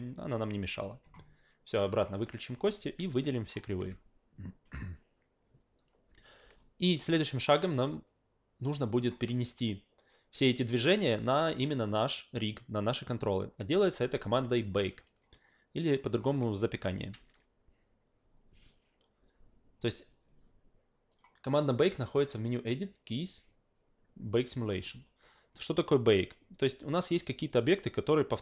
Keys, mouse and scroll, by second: 1.9 click, 2.4 alt+right click, 2.6 alt+right click, 3.2 click, 3.8 f, 6.6 alt+click, 7.3 alt+middle click, 7.7 alt+right click, 8.6 alt+right click, 8.9 alt+click, 14.2 alt+right click, 14.5 alt+middle click, 15.0 alt+right click, 15.3 alt+click, 21.1 click.